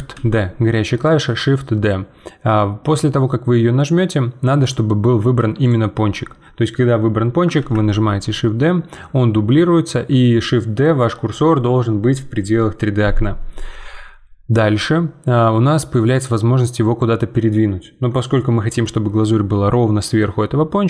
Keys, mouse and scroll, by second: 0.1 shift+d, 5.6-7.6 drag, 7.6 shift+d.